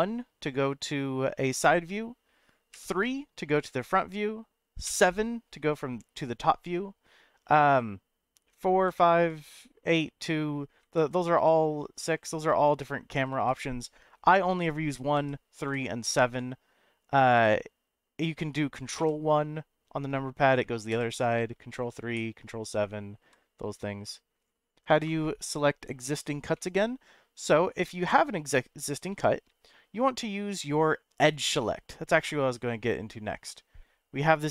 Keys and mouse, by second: 2.7 KP_3, 19.0 ctrl+KP_1, 23.2 KP_7, 26.5 middle click, 27.8 middle click, 29.1 shift+middle click, 31.3 click.